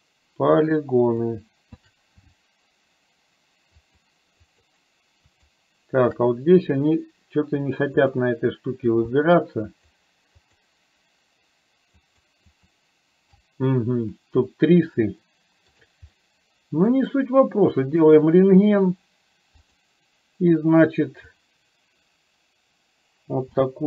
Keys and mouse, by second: 0.5 alt+shift+click, 3.9 alt+shift+click, 4.5 alt+shift+click, 5.3 alt+shift+click, 8.0 click, 9.0 shift+a, 9.9 click, 10.4 click, 11.9 click, 12.5 click, 15.3 shift+middle click, 16.3 middle click, 18.2 click, 19.7 click, 21.4-23.8 drag.